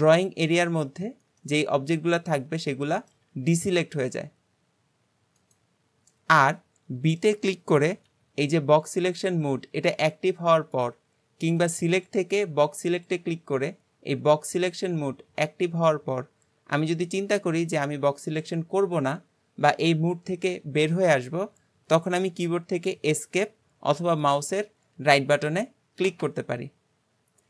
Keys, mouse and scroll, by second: 1.4-3.3 middle drag, 3.3 g, 6.4-8.1 middle drag, 8.1 b, 11.6-15.1 drag.